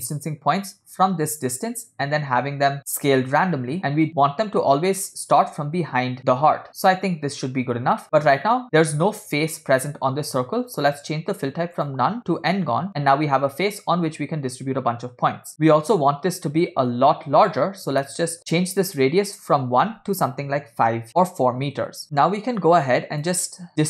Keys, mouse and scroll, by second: 4.9-5.5 scroll up 3, 6.6 scroll down 2, 8.5-9.1 shift+middle drag, 11.8-12.6 drag, 15.5-16.8 middle drag, 18.1 middle click, 18.4 scroll down 3, 18.6 scroll up 2, 19.4 click, 22.0-23.3 drag, 22.0 middle click, 22.0 scroll down 2.